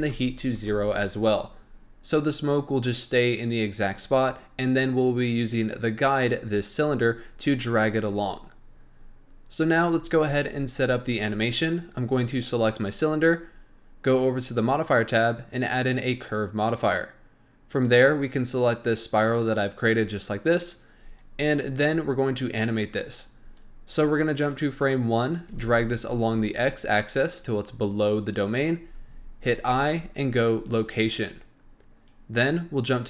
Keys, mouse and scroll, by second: 6.1 click, 10.9 click, 14.4 click, 15.5-20.8 drag, 24.5 drag, 25.3 g, 32.7 click.